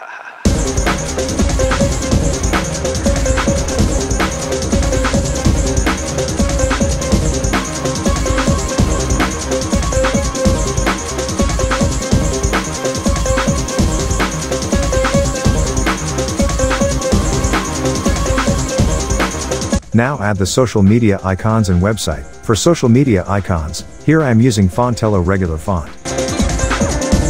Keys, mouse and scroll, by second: 2.1 click, 4.3-5.7 drag, 13.7 x, 13.9 scroll down 1, 14.0 x, 14.6 x, 15.9 alt+scroll up 1, 16.1 space, 16.3 click, 16.4 space, 16.9 alt+scroll up 1, 17.2 space, 17.3-17.8 click, 17.6 space, 18.1 click, 23.8-24.6 scroll down 1, 24.6 click.